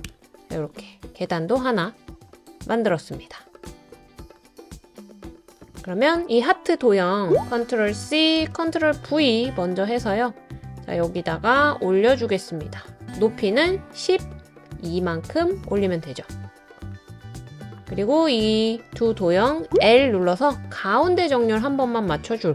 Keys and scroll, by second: 0.0 Return, 1.6-2.4 typing, 4.2-6.6 typing, 7.2 ctrl+v, 8.0 super+c, 8.3 super+v, 19.8 i.